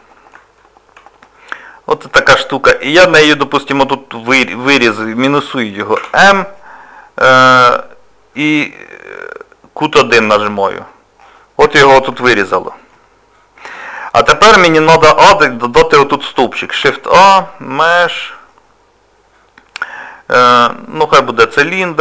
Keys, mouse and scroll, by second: 0.6 shift+middle click, 11.8 shift+middle click, 12.3 scroll down 1, 12.9 middle click, 14.2 scroll up 2, 16.8 shift+a.